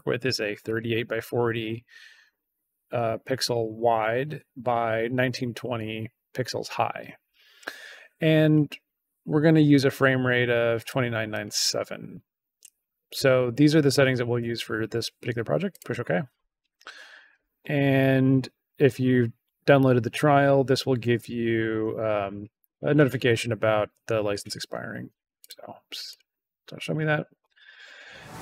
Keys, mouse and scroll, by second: 8.4 click, 10.7 click, 11.2 click, 15.6 click, 25.3 click, 26.0 click.